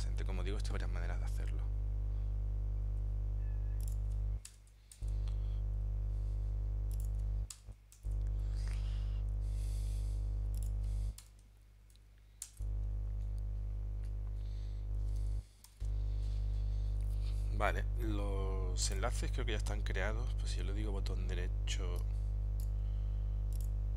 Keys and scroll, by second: 5.0 shift+Return, 8.0 shift+Return, 12.5 shift+Return, 15.8 ctrl+alt+super+p.